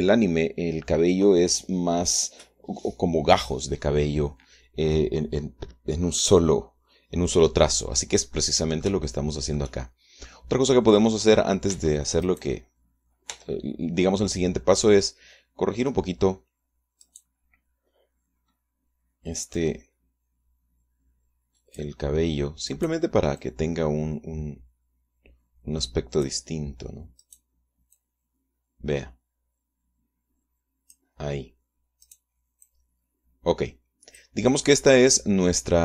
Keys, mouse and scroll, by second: 9.0 click, 9.9 shift+click, 10.8 click, 11.1 middle click, 12.4 Tab, 12.9 right click, 14.0 Tab, 17.7 right click, 20.2-22.6 drag, 23.4 right click, 24.0-27.1 drag, 27.8 click, 28.6-31.8 drag, 32.7 click, 33.3-35.2 drag, 35.2-35.8 middle drag.